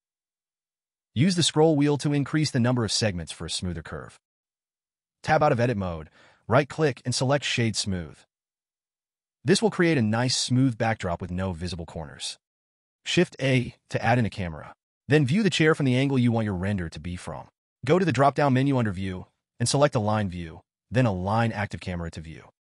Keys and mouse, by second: 0.4 ctrl+b, 5.4 Tab, 5.4 typing, 6.2 click, 7.2-7.5 typing, 7.5-8.1 drag, 9.1 click, 13.1 click, 14.0 shift+a, 19.1-22.7 drag.